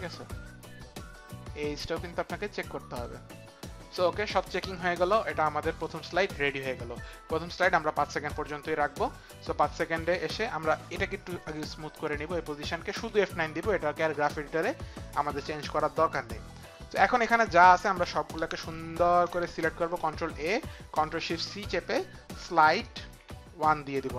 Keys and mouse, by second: 1.4 click, 4.7 click, 12.1 click, 19.6 ctrl+a, 21.5 ctrl+shift+c, 21.5 ctrl+a, 22.4-23.9 typing.